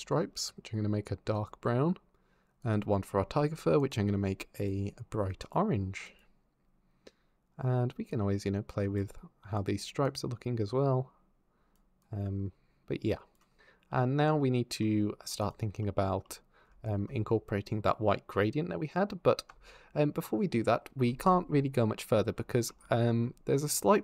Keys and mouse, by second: 2.5 click, 8.0 click, 9.4 click, 9.8-11.6 drag, 11.8-13.2 drag, 15.2 click.